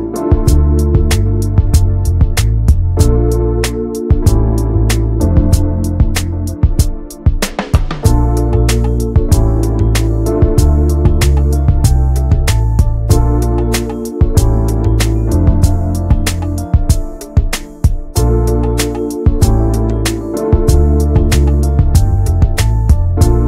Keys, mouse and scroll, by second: 0.5 alt+middle click, 0.9 shift+middle click, 1.3 scroll up 2, 1.7 shift+middle click, 2.9 alt+z, 3.3 shift+middle click, 3.8 click, 4.5 alt+z, 4.7 alt+middle click, 5.2 shift+middle click, 6.0 scroll down 1, 6.2-7.5 middle drag, 7.5 click, 7.8 shift+click, 8.9 ctrl+j, 9.1 ctrl+a, 9.6 click, 9.7 scroll down 1, 10.0 middle click, 10.4 ctrl+s, 10.5 scroll down 1, 10.7 middle click, 11.2 click, 11.5 Tab, 11.6-12.0 scroll up 2, 12.0 click, 12.8 scroll down 1, 13.0 alt+middle click, 13.5-13.9 scroll down 1, 13.9 shift+d, 14.8 ctrl+z, 15.0-15.6 scroll up 2, 15.6 click, 16.2-16.7 scroll up 1, 16.7 click, 19.9 scroll down 2, 20.1-20.5 scroll up 3, 20.7 s, 22.0 click.